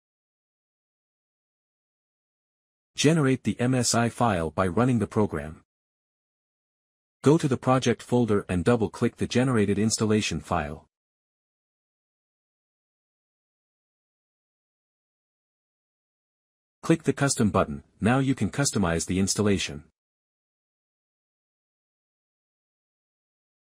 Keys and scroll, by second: 0.0-1.1 typing, 1.5 ctrl+s, 1.8 Escape, 6.7 Return.